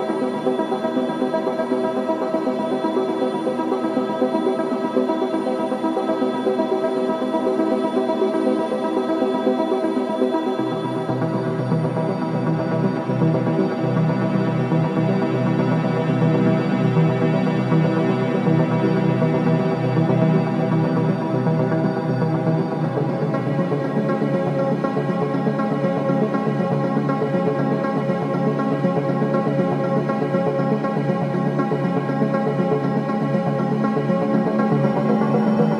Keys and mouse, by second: 1.2 g, 2.2 Escape, 7.2-8.2 drag, 8.5 s, 9.7 click, 10.8 g, 14.9-18.2 drag, 15.6 g, 18.2 Delete, 18.7 click, 19.4 Tab, 20.0-21.9 typing, 22.6 Tab, 25.6-29.1 drag, 31.6-35.4 drag.